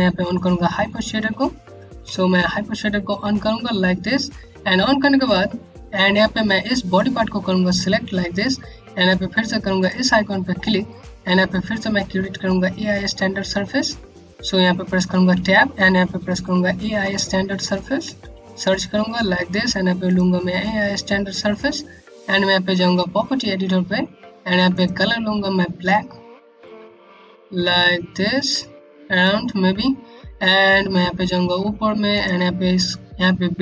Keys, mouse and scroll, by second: 1.5 h, 5.6 h, 6.4 click, 9.3 click, 10.1-12.0 scroll down 1, 12.0-13.3 scroll up 1, 13.3-13.7 scroll down 1, 13.9 middle click, 14.9 Tab, 16.1-18.3 typing, 19.6 click, 24.2 click, 30.1-30.8 scroll up 1, 31.6 click.